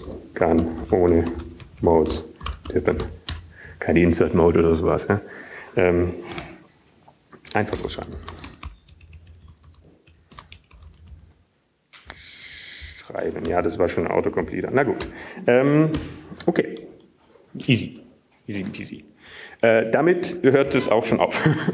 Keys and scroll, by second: 0.1 typing, 1.3 typing, 3.9 typing, 5.3-7.3 typing, 11.0-20.4 typing.